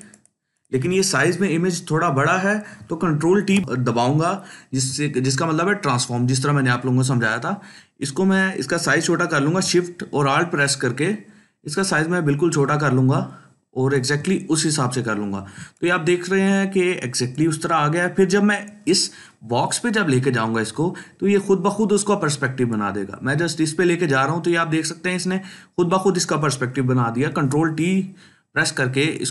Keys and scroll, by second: 3.2 ctrl+t, 15.5 ctrl+space, 16.0 ctrl+space, 16.2 ctrl+space, 27.1 ctrl+t.